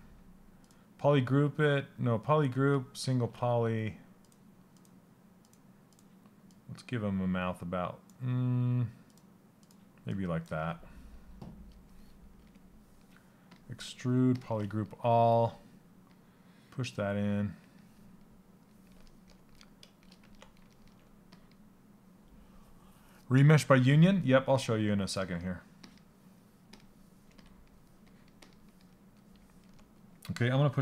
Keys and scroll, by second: 12.0 space.